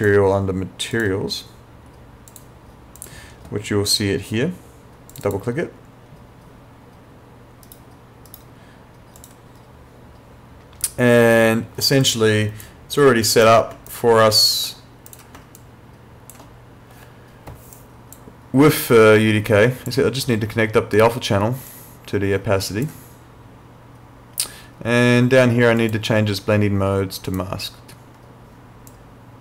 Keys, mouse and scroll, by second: 7.7 right click, 9.2 click, 12.0 click, 13.9 ctrl+click, 15.6 ctrl+click, 17.8 click, 21.7 click, 25.8 click.